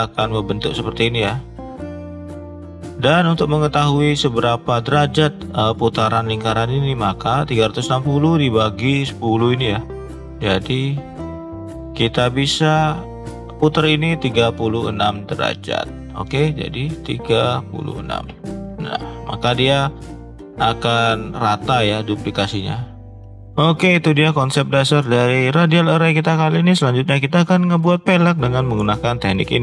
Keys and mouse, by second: 8.3 click, 10.8 click, 15.5 click, 16.6-19.3 drag, 20.4 click, 25.6-26.1 middle drag.